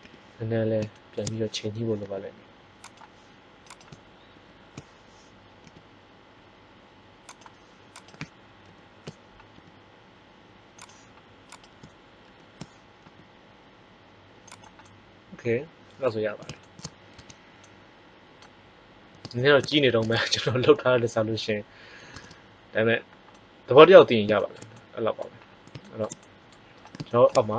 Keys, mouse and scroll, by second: 0.0 KP_3, 2.0 g, 4.3 ctrl+l, 5.6 g, 7.3-9.4 drag, 7.9 right click, 8.5 ctrl+l, 9.5 g, 12.2 ctrl+l, 13.0 g, 14.7-16.5 middle drag, 17.1 Tab.